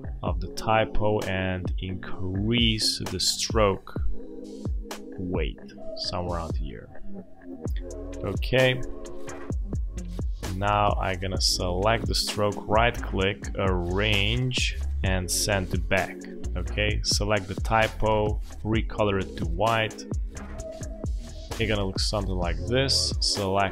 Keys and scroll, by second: 20.8 space.